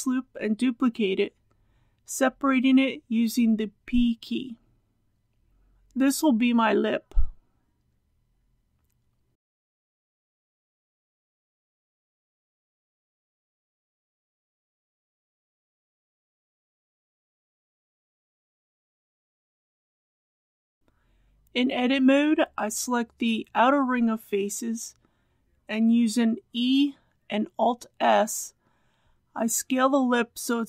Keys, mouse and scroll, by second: 0.2 shift+d, 1.9 p, 2.4 click, 3.2 Tab, 3.7 click, 7.4-7.8 typing, 8.2 Return, 12.2 KP_1, 13.7 Tab, 15.0 a, 15.6 e, 19.5 click, 20.1-21.2 typing, 23.4 click, 23.7-25.3 middle drag, 25.5 ctrl+z, 26.9 alt+click, 27.5 middle click, 28.1 scroll up 1, 29.1 e, 30.0 alt+s.